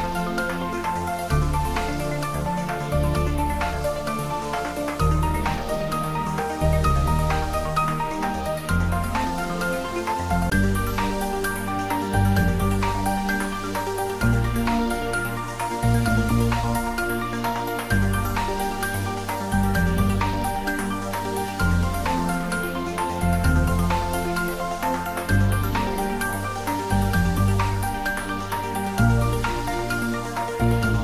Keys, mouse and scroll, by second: 1.6-1.9 scroll up 1, 5.5 click, 13.6 click, 13.7 click, 18.0 click, 23.3-23.7 scroll up 1, 27.1 scroll up 1, 28.1 alt+shift+click, 30.3 alt+shift+click.